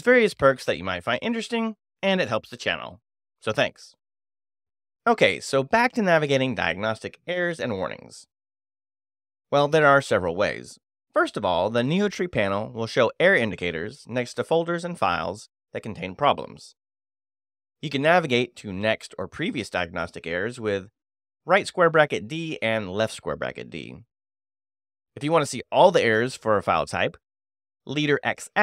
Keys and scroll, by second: 12.3 space, 12.5 e, 19.1 space, 19.2 e, 22.0-23.9 typing, 25.3-26.2 typing, 27.5 space, 27.6 x.